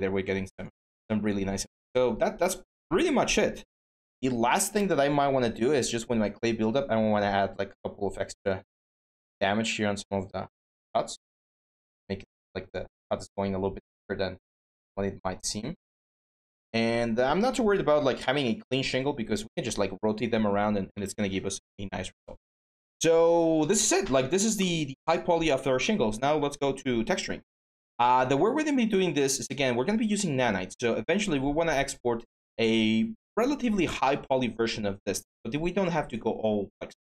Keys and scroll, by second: 3.9-4.8 typing.